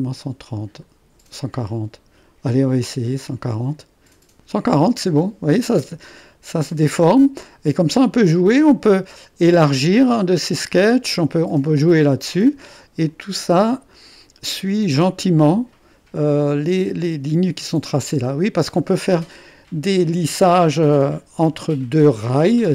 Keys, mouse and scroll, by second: 0.0-0.8 scroll up 2, 0.8-3.4 scroll up 1, 3.4-5.5 drag, 8.3-10.1 middle drag, 9.3-10.5 drag, 11.5-12.7 drag, 12.7-16.2 middle drag, 16.3 middle click, 16.9-18.0 drag, 18.9 click, 19.7-21.5 drag.